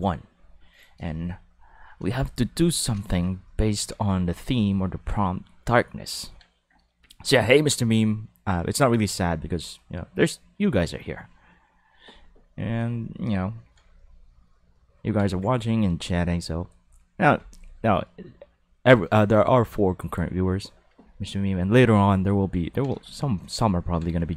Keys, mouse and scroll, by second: 0.7 click, 2.8-4.0 shift+middle drag, 6.3-7.8 ctrl+middle drag, 13.7-15.8 ctrl+middle drag, 22.3-23.5 ctrl+middle drag, 24.0 middle click.